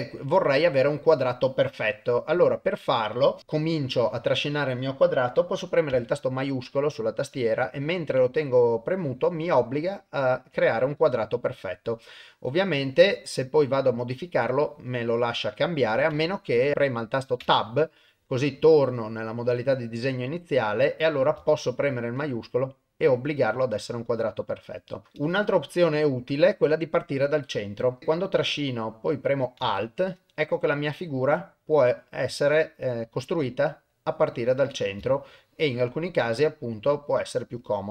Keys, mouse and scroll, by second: 3.7-26.0 drag, 28.1-34.0 drag, 34.7-37.9 drag.